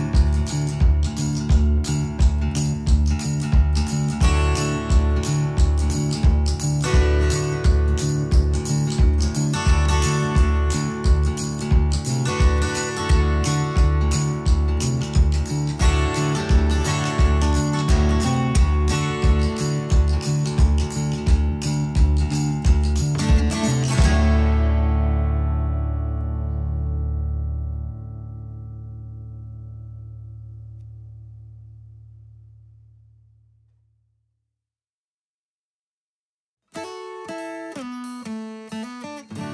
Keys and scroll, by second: 2.2-3.2 typing, 5.2 ctrl+z, 5.9 space, 9.0 ctrl+g, 12.5 space, 18.3-20.9 typing, 21.4 Return, 22.1 Escape, 22.8 Escape, 25.0 Escape, 26.4 Escape, 27.2 Escape, 31.1 m, 32.4 Right, 34.4 space.